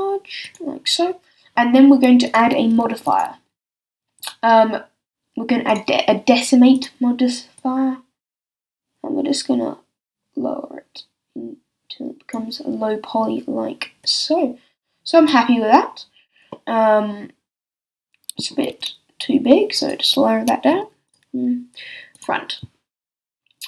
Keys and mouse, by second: 0.5-2.3 drag, 5.6-6.7 middle drag, 10.9-14.0 middle drag, 16.3 middle click, 18.7-20.3 middle drag, 18.7 s, 20.3 click.